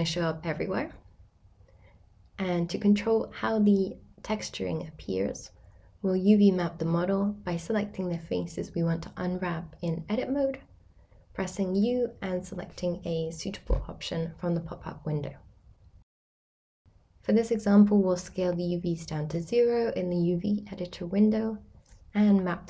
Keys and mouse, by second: 3.2-4.4 drag, 6.0 Tab, 6.6 middle click, 6.9 a, 8.4 middle click, 9.0 a, 11.9 u, 15.8 a, 16.4 a, 17.1 s, 18.0 0, 18.3 click, 19.8 middle click, 21.3 g, 22.2 ctrl+click.